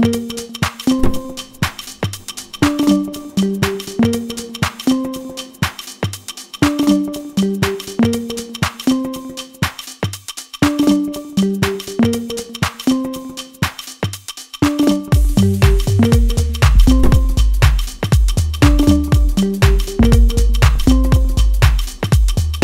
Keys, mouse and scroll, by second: 5.2 middle click, 7.1 Tab, 7.6 middle click, 8.7-10.1 scroll up 2, 12.9 alt+h, 15.2-16.0 scroll down 2, 16.3 click, 17.4 click, 17.9 click, 18.7 middle click, 20.1 Tab, 20.6 scroll down 1, 21.0 Tab, 21.6 scroll down 1, 22.0 middle click.